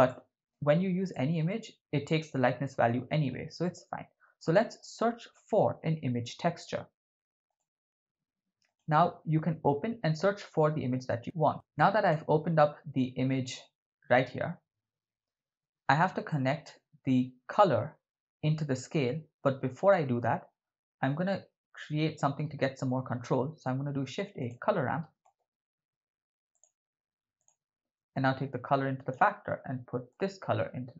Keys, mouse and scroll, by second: 0.1 middle click, 1.1 middle click, 1.9 shift+a, 11.8 click, 16.3-18.9 drag, 23.5 shift+a, 28.1-29.1 drag, 30.1 drag.